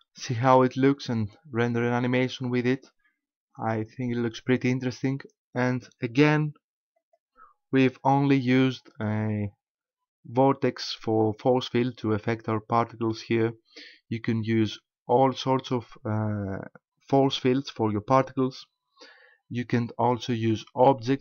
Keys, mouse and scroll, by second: 7.0 click.